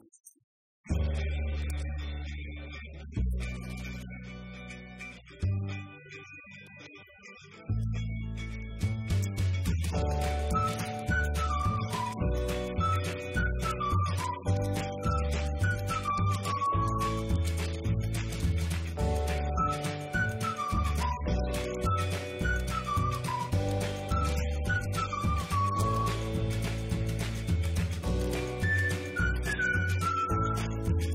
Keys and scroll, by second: 12.2 shift+z, 13.4 BackSpace, 13.9 shift+x, 14.4 shift+z, 14.7 y, 15.0 Return, 15.3 Up, 15.4 Right, 16.3-18.5 typing, 18.7 Up, 18.8 Right, 21.6 5, 21.9 Return, 23.2 Up, 24.6 Right, 26.1 Left, 30.1 Delete, 30.5 Right, 30.8 Left.